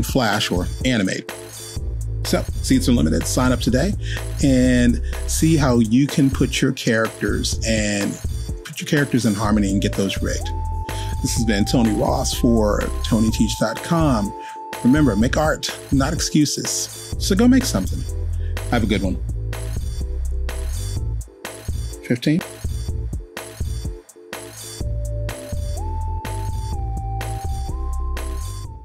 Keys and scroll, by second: 8.9 Return, 9.0-10.0 typing, 25.4 super+p.